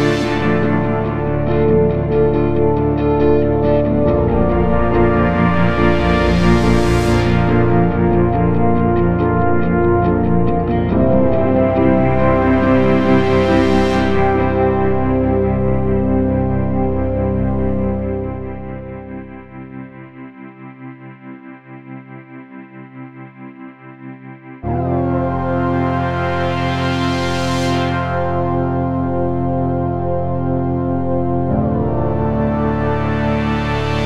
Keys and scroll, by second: 15.7 shift+F2, 16.1 Escape, 32.1 ctrl+z, 33.9 Escape.